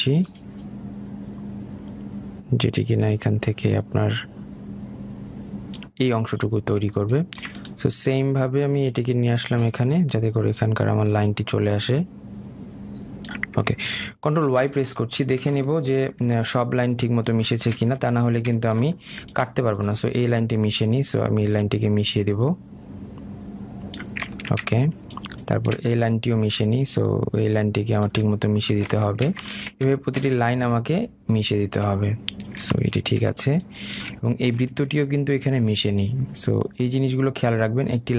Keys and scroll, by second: 15.3 ctrl+y.